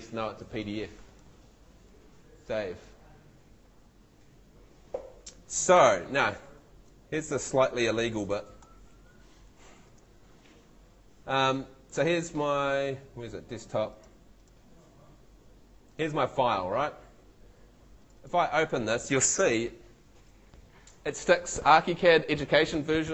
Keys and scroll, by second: 6.9 super+Tab, 8.1 super+n.